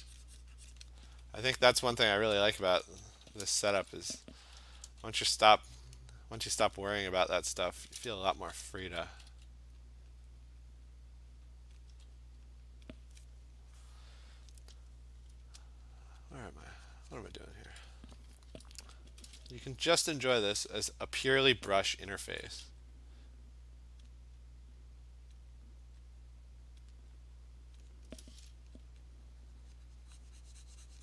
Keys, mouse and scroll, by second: 0.8 click, 1.2 click, 2.5 alt+click, 3.3-4.9 typing, 3.9 click, 6.6 alt+click, 7.8 alt+click, 8.4-9.3 typing, 9.8 click, 10.6 click, 11.0 alt+click, 11.8 click, 12.0 [, 12.9 click, 16.2 click, 16.6 [, 17.4 click, 17.7 [, 19.2 alt+click, 19.5 click, 19.8-20.6 typing, 20.8 click, 22.1 click, 22.3 [, 22.5 [, 24.1 click, 25.4 click, 26.9 click, 27.8 click.